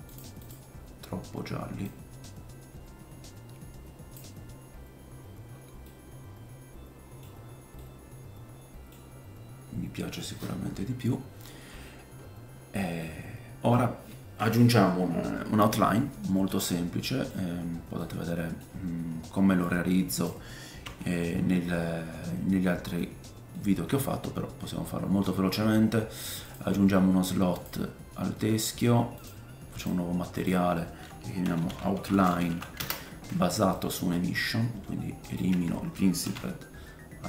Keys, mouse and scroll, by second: 0.4 middle click, 0.4 right click, 5.9 middle click, 7.4 scroll up 2, 7.8 middle click, 10.7-12.9 scroll down 10, 13.0 middle click, 17.5-18.0 scroll down 2, 18.0 middle click, 20.8 x, 21.6 middle click, 22.3 middle click, 23.8 middle click, 26.5 click, 29.2 click, 30.3 click, 33.8 middle click, 34.1-35.2 scroll up 5, 34.7-37.2 drag, 34.7 middle click, 34.7 right click, 35.5 x, 36.2 shift+a.